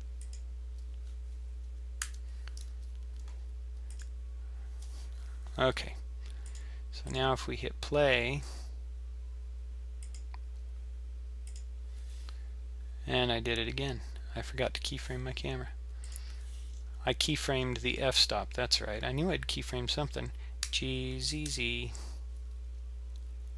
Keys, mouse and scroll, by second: 2.0 i, 6.5 click, 7.1 click, 11.5 click, 14.6-15.1 scroll down 3, 16.0 click, 16.7-18.4 scroll down 6, 18.9-20.6 scroll up 2, 20.6 g.